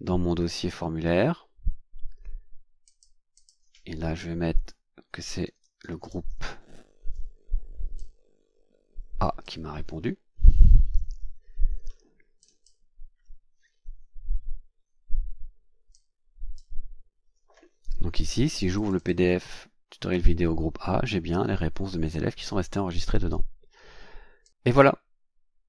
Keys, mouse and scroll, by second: 2.8 click, 3.3 click, 4.5 KP_Subtract, 5.2-6.9 typing, 7.9-9.6 drag, 10.9 shift+a, 12.4 click, 15.9 click, 18.7 click.